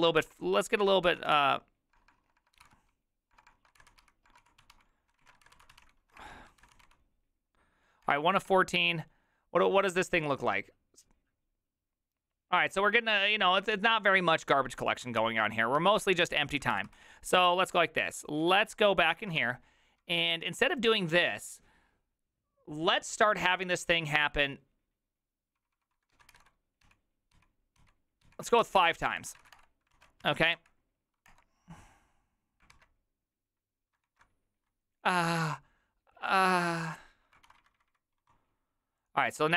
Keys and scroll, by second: 0.2 ctrl+f, 0.8-7.3 typing, 8.0 Return, 8.5 Return, 15.8 alt+f, 15.8 alt+{, 16.7 ctrl+c, 16.8 ctrl+c, 17.3 ctrl+a, 17.5 2, 18.4 ctrl+a, 18.6-20.9 typing, 19.1 ctrl+c, 19.2 ctrl+:, 19.4 Return, 26.8-30.2 typing, 30.5 Up, 31.3 Return, 32.7 alt+[, 34.1 alt+q, 37.8 alt+r, 37.8 Right, 37.9 Right, 38.2 Escape.